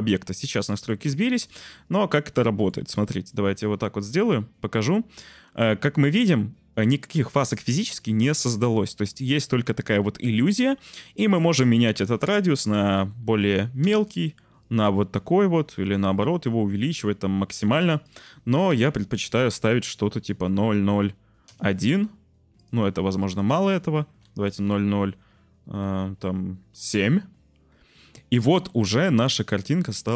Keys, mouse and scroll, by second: 0.5-0.8 middle drag, 2.4 shift+middle drag, 2.9 middle click, 3.8 middle click, 5.5 middle click, 5.7-7.9 drag, 7.9 middle click, 9.1-11.4 middle drag, 17.3 click, 17.9-21.4 drag, 20.5 0, 22.5 click, 23.2-26.8 drag, 28.7-29.0 shift+middle drag.